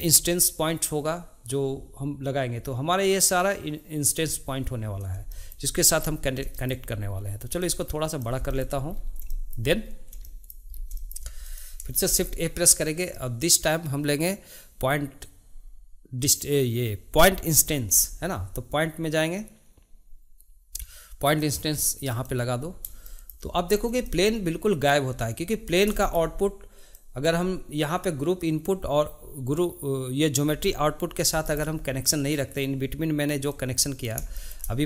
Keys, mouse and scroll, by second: 5.3 shift+middle click, 6.0-6.5 scroll down 1, 6.5-7.6 shift+middle drag, 7.6 click, 8.5-9.0 shift+middle drag, 9.0-9.3 scroll up 2, 9.3-9.8 shift+middle drag, 9.8-10.2 scroll up 1, 10.2 shift+middle click, 10.8 scroll up 1, 11.0-11.4 shift+middle drag, 11.4 click, 12.0 shift+a, 23.1 shift+middle click, 23.8 scroll down 1, 24.0-25.2 shift+middle drag, 25.2 click, 26.0-26.9 shift+middle drag, 26.9 click, 31.5-33.5 shift+middle drag, 33.5-34.3 drag, 34.3-34.8 shift+middle drag.